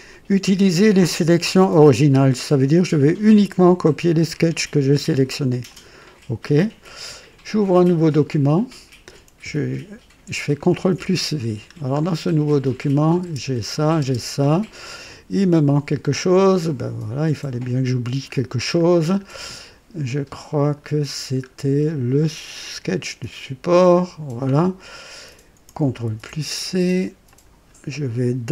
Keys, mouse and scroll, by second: 5.7 click, 8.3 click, 10.7 ctrl+v, 11.6-12.0 ctrl+scroll down 1, 12.8 click, 13.2 space, 13.7 click, 14.0 space, 18.3 scroll up 2, 18.9 scroll down 2, 20.6 click, 21.2 scroll down 1, 22.8 click, 23.7 click, 26.1 ctrl+c, 27.3 click.